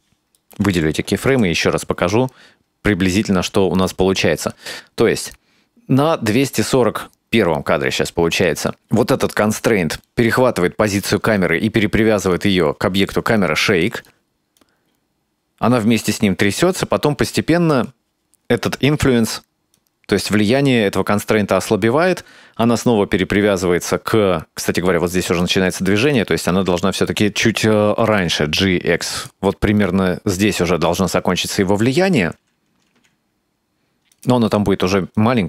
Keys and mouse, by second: 0.0 shift+middle click, 0.3 right click, 1.3 KP_Decimal, 3.9-8.8 drag, 12.4 right click, 13.9 right click, 14.6-17.8 drag, 19.8-25.5 drag, 26.1 right click, 26.7-27.0 right drag, 28.1 g, 29.9-32.3 drag, 32.9 g, 35.2-35.4 drag.